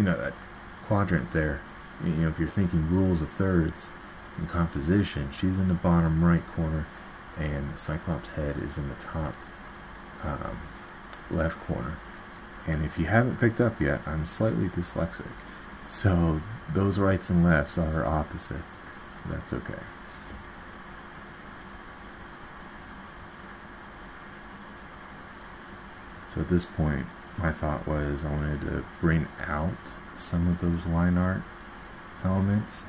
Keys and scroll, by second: 9.0 alt+Tab.